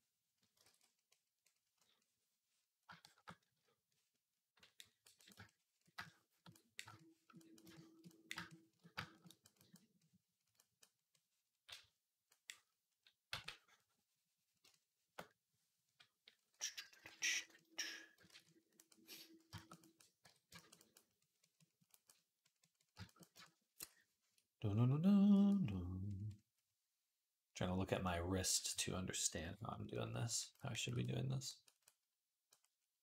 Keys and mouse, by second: 0.4 ctrl+z, 13.1 v, 15.7 shift+\, 16.9 ], 17.0 ], 17.2 ], 18.0 [, 18.1 ctrl+z, 20.0 j.